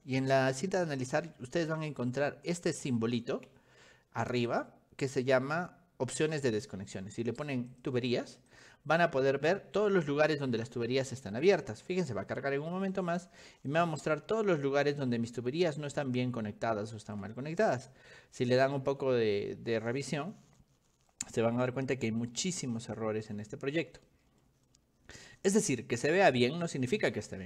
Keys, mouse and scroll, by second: 1.9 ctrl+click, 3.2 click, 4.5 click, 7.8 click, 8.6 click, 13.4 middle click, 14.5 middle click, 14.6 middle click, 15.7 middle click, 15.9-17.1 shift+middle drag, 17.9-19.1 scroll up 10, 19.9 middle click, 20.0 middle click, 20.5 middle click, 20.6 middle click, 21.0 middle click, 22.4 middle click, 22.5 middle click, 23.9 middle click, 24.1 middle click, 24.5 middle click, 26.1 click, 26.7 middle click, 27.0 middle click, 27.3 middle click, 27.3 scroll down 1.